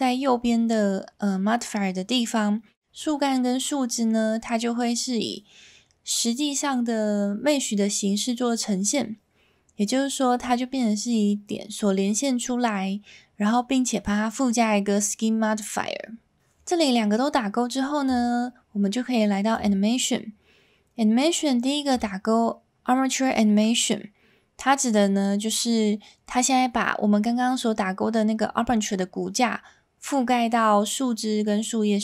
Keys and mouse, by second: 18.2-19.7 drag.